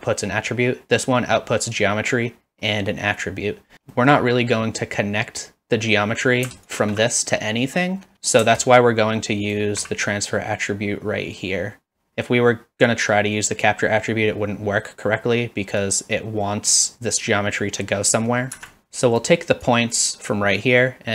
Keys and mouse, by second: 3.9 middle click, 6.7 alt+shift+click, 15.8-18.7 drag, 19.0 click, 19.7 click, 20.6-21.1 drag.